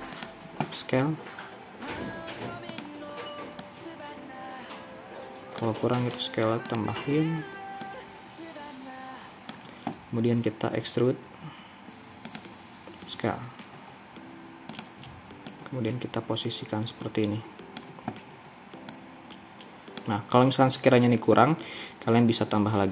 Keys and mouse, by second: 1.1 s, 4.1-6.0 drag, 6.0 s, 9.1-10.8 drag, 10.8 e, 13.0 s, 16.1-22.2 drag.